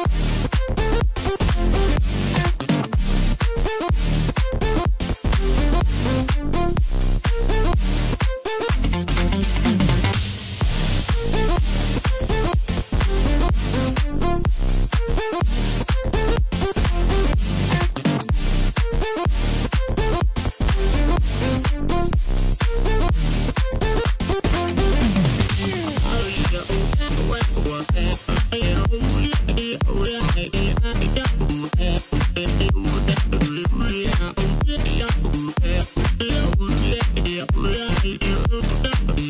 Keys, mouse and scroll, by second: 3.7-6.0 middle drag, 6.0 Tab, 6.4-6.8 scroll up 1, 6.8-7.1 scroll down 3, 7.1-10.2 middle drag, 11.1-12.5 scroll down 2, 12.5-14.1 scroll down 1, 14.1 click, 16.4-20.8 drag, 22.3-25.3 middle drag, 26.1 KP_7, 28.0-31.1 drag, 32.5-35.5 drag, 38.1-39.2 drag.